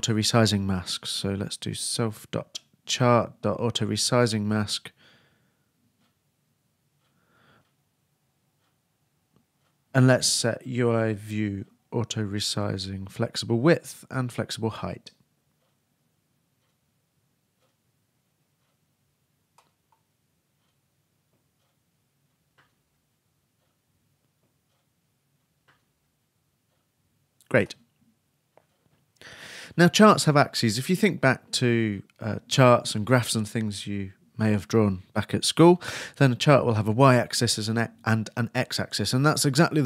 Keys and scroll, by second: 12.2-14.0 typing, 17.0 shift+Tab, 17.1 shift+a, 22.9-25.5 typing, 26.1 shift+Down.